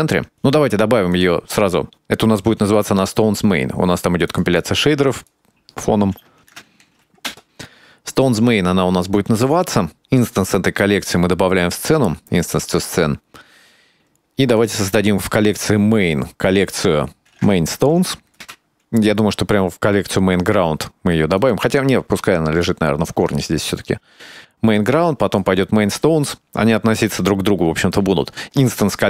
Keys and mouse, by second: 4.6-7.7 drag, 11.3 right click, 13.9 click, 14.8 click, 16.4 click, 16.7-18.8 drag, 18.9-21.8 drag, 23.0-23.7 drag, 24.2-25.6 drag, 27.6-29.0 drag.